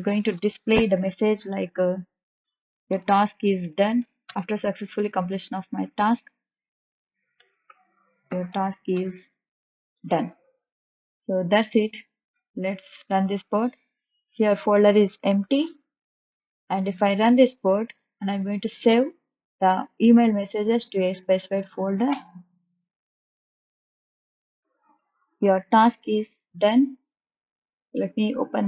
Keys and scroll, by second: 0.2 shift+', 2.8-4.2 typing, 7.3-10.1 typing.